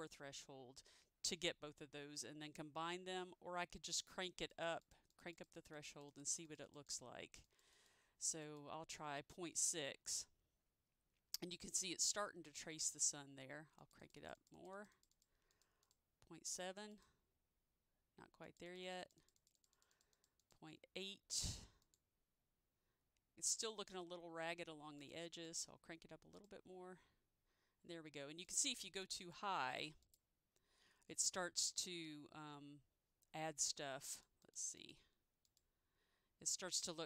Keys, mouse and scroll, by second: 4.6 click, 5.2 double click, 5.4 click, 5.7 double click, 5.8 click, 6.0 double click, 6.4 double click, 6.6 click, 6.8 double click, 7.0 click, 10.2 click, 14.3 double click, 14.5 click, 14.7 double click, 14.9 click, 15.1 double click, 15.2 click, 15.6 double click, 15.9 click, 18.8 double click, 19.1 double click, 19.3 click, 19.5 double click, 19.7 click, 19.9 double click, 20.0 click, 20.3 double click, 20.5 click, 25.1 click, 25.4 double click, 28.6 click, 28.8 double click, 29.3 click, 34.2 click, 34.6 double click, 34.9 click.